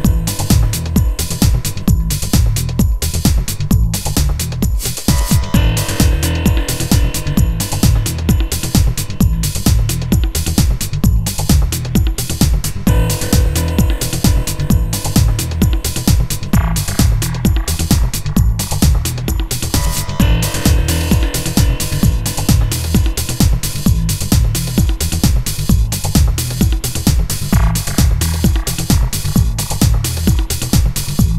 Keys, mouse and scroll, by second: 3.4-8.7 right drag, 11.6 i, 12.5-13.8 right drag, 14.7-15.5 right drag, 15.0 i, 15.5 i, 16.7 shift+Right, 20.2 g, 26.1 i, 27.4 shift+Left.